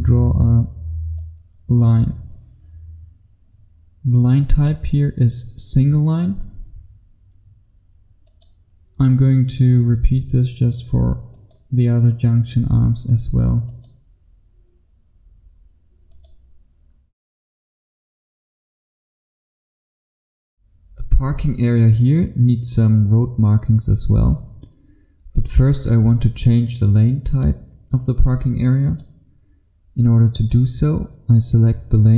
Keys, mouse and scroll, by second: 17.1-17.6 scroll up 1, 17.6-19.3 scroll down 1, 20.4 F1, 20.9-28.9 scroll up 1, 28.9 click.